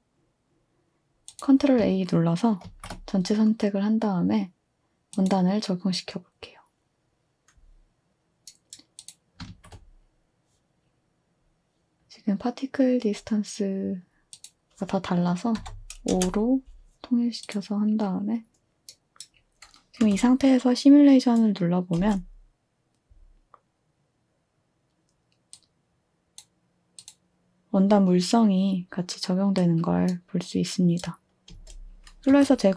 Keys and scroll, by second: 2.7 ctrl+a, 9.5 ctrl+a, 15.6 5, 16.1 Return, 18.9-20.5 typing, 22.0 space, 31.5 space, 32.3 space.